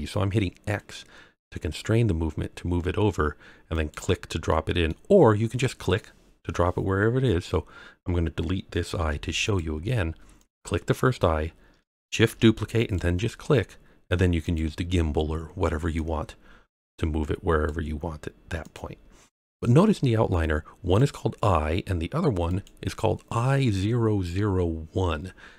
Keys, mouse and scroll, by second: 3.7 click, 4.5-4.8 middle drag, 8.9 x, 10.3 click, 10.9 middle click, 12.2 shift+d, 12.8 click, 14.4 click, 15.9 click, 18.6 click, 20.9 click, 22.4 click.